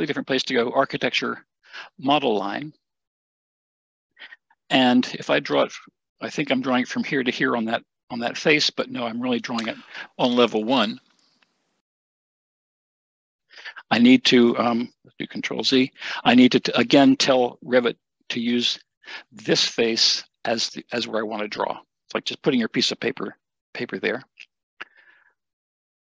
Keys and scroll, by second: 8.2 Escape, 15.1 ctrl+shift+z.